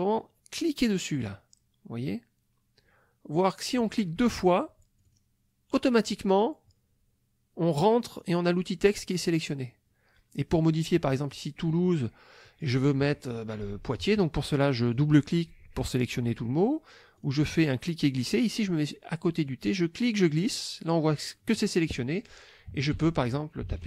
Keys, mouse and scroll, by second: 1.1 click, 5.0 click, 11.9 click, 14.8 click, 17.2 click, 19.5-21.3 drag, 22.7 Caps_Lock, 22.9-23.8 typing.